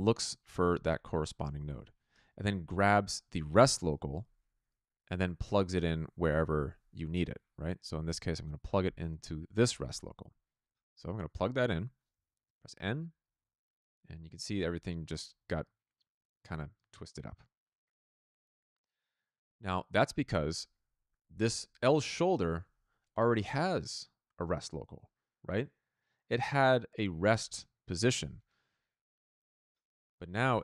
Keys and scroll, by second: 12.7 n, 30.3 ctrl+z.